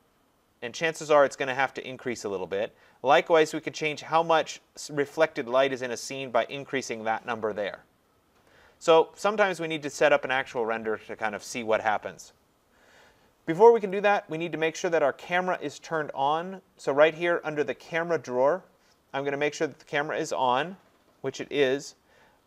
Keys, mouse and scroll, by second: 6.5 click, 13.9 click, 15.6 click.